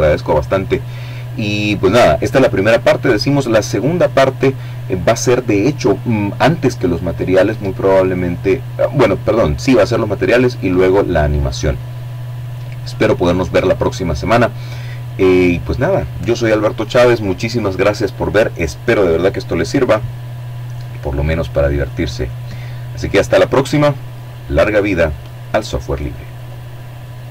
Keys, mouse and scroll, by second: 23.7 click, 25.0-27.3 drag.